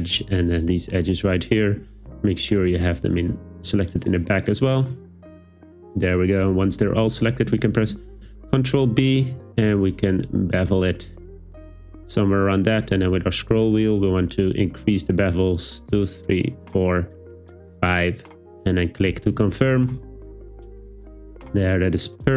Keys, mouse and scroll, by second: 0.7 alt+shift+click, 8.3 super+b, 18.7 click.